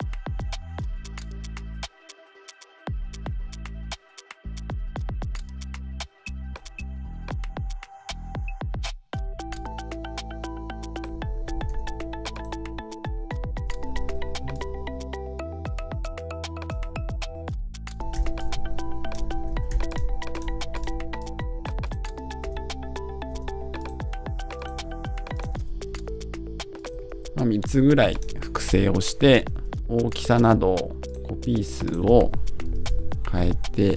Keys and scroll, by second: 32.7 Return.